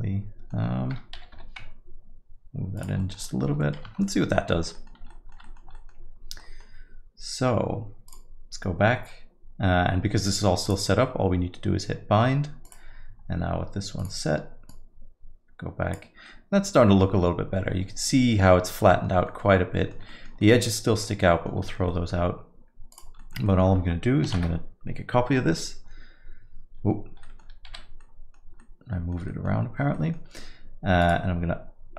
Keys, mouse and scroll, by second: 1.1 g, 3.0 alt+middle click, 3.2 middle click, 3.6 alt+middle click, 3.9 Tab, 4.0 middle click, 4.3-4.9 scroll down 4, 4.5 alt+middle click, 4.7 middle click, 5.1 alt+middle click, 5.4 middle click, 5.7 alt+middle click, 6.4 alt+middle click, 8.0 click, 10.6 click, 11.8 middle click, 12.6 click, 14.0 click, 16.2 alt+middle click, 18.8 alt+middle click, 19.2 middle click, 19.5 alt+middle click, 20.1 middle click, 20.4 alt+middle click, 21.3 alt+middle click, 21.6 middle click, 21.8 alt+middle click, 22.9 click, 23.2 alt+middle click, 23.4 middle click, 24.9 shift+d, 27.2 middle click, 28.2 alt+g, 28.3 middle click, 28.6 alt+middle click, 29.3 middle click, 29.9 middle click, 31.0 click.